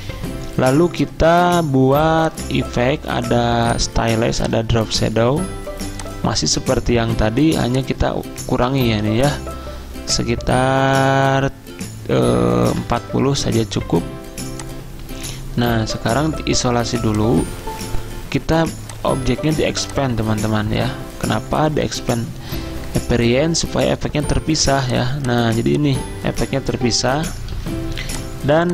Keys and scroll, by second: 12.6-13.5 typing, 14.7-15.5 typing, 27.6 ctrl+z.